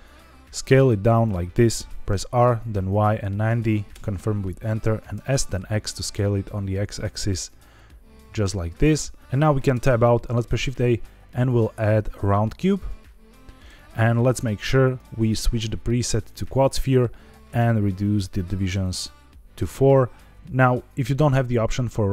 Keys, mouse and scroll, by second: 1.1 click, 2.1 r, 2.7 y, 3.3 KP_9, 3.4 KP_0, 3.8 KP_Enter, 5.1 s, 5.5 x, 8.3 click, 9.6 Tab, 10.3 shift+a, 14.8-16.3 drag, 17.8 click, 17.9 click, 18.2 click, 18.7 click.